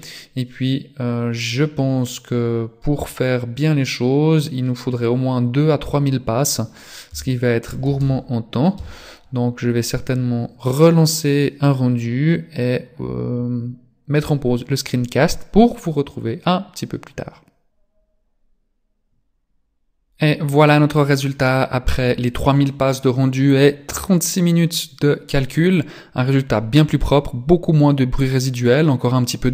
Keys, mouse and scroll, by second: 1.0 click, 7.5 KP_0, 7.6 KP_0.